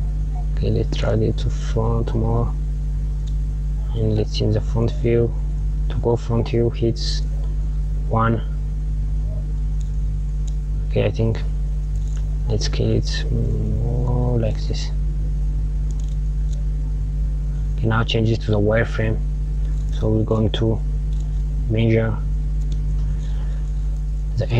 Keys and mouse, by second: 0.8 g, 5.9 KP_1, 8.7-11.1 drag, 11.5 click, 12.5 s, 15.1 KP_1, 16.4 KP_1, 19.2 click, 19.9 KP_Add, 21.9-23.0 drag, 23.0 KP_Add.